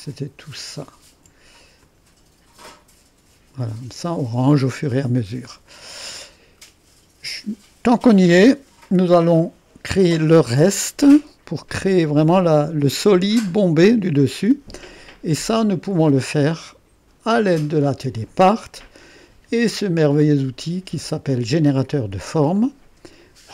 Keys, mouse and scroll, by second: 5.7 click, 13.9-19.0 drag, 21.6 click, 22.6 click.